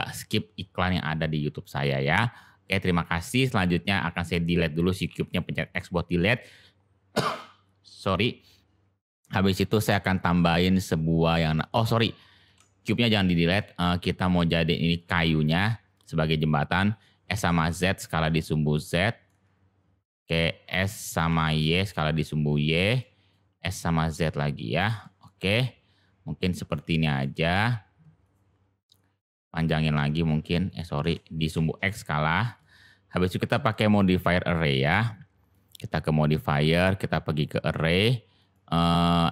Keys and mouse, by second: 2.8 click, 3.3-3.9 middle drag, 12.4 ctrl+z, 13.5 middle drag, 14.3 click, 14.9-15.2 middle drag, 18.9-19.2 middle drag, 21.0 middle drag, 23.0 middle click, 25.0 middle click, 25.5-26.7 middle drag, 26.8-27.1 shift+middle drag, 28.2 click, 29.2 click, 31.0 ctrl+z, 31.2 s, 32.5-33.1 middle drag, 33.5 middle click, 36.3-37.4 drag, 38.3 click.